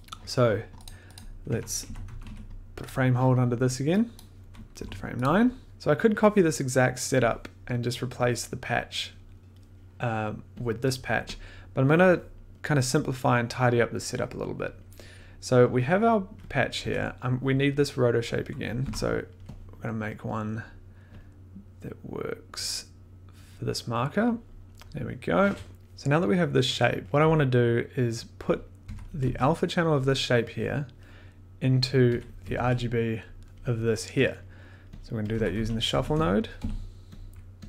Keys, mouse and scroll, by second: 0.8 click, 1.1 click, 1.5 Tab, 1.6-2.7 typing, 2.8 click, 4.1 click, 4.8 9, 5.2 click, 5.7 scroll, 7.1 click, 8.7 click, 9.7 middle click, 10.8 click, 11.3 click, 12.2 middle click, 13.4 middle click, 14.7 middle click, 15.9 click, 16.6 click, 16.8 1, 18.7 click, 18.8 o, 19.6 click, 19.7 middle click, 20.1 scroll, 21.2 click, 21.4 click, 21.6 click, 21.7 click, 21.9 click, 22.0 click, 22.1 click, 22.4 Return, 22.6-22.9 click, 22.7 click, 22.8 click, 22.9 click, 23.0 click, 23.3 click, 23.5 click, 23.7 click, 23.9 click, 24.3 click, 24.6 click, 24.8 click, 25.1 click, 25.3 click, 25.3 click, 25.6 click, 25.7 click, 27.0 click, 28.6 click, 28.8 1, 32.0 click, 32.1 1, 35.0 click, 35.0 middle click, 35.3 click, 35.3-37.0 typing, 37.1 click.